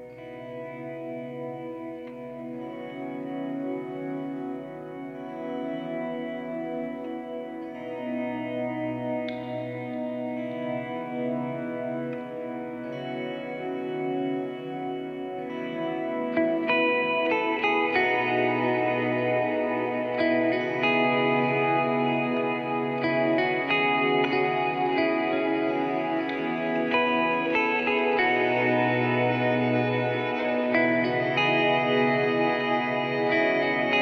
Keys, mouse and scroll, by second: 0.0 shift+End, 3.2 Home, 3.9 Down, 5.2 shift+End, 6.0 shift+Down, 7.4 click, 9.6 click, 10.4 right click, 11.5 right click, 12.2 right click, 13.0 click, 14.9 click, 16.9 click, 19.6 alt+Tab, 20.8 alt+Tab, 21.5 alt+Tab, 22.4 alt+Tab, 22.8 alt+Tab, 28.2 alt+shift+Tab, 28.8 alt+shift+Tab, 30.6 alt+shift+Tab, 31.6 alt+shift+Tab.